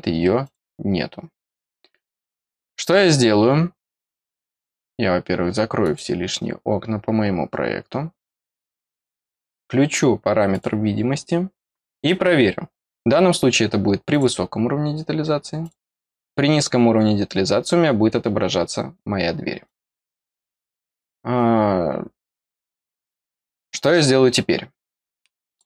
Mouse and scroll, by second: 0.4 click, 5.8 click, 9.0 click, 10.4 click, 14.0 click, 15.6 click, 19.6 click, 23.2 click, 25.4 click.